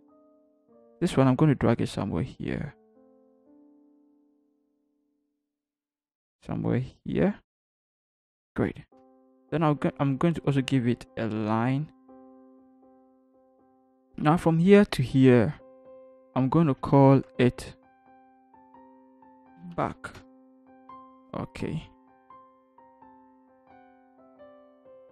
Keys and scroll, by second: 9.1 Return, 16.8 ctrl+shift+g, 18.8 Caps_Lock, 19.2 b, 19.3 a, 19.6 c, 19.8 k, 20.2 Return.